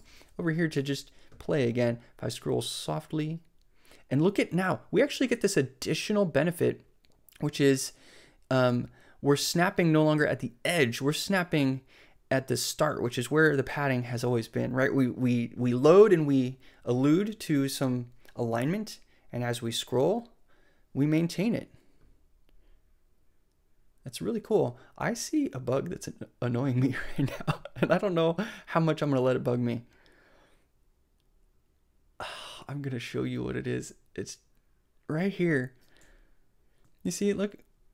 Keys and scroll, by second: 0.0 super+c.